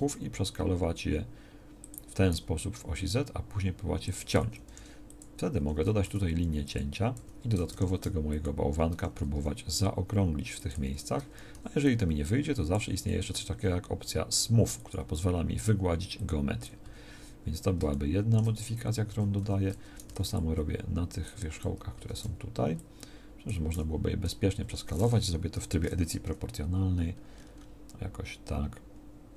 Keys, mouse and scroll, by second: 2.3 s, 6.0 s, 7.7 ctrl+r, 9.3 s, 13.2 w, 15.5 w, 16.8 a, 19.1 a, 20.1 b, 21.9 a, 22.2 b, 23.7 s.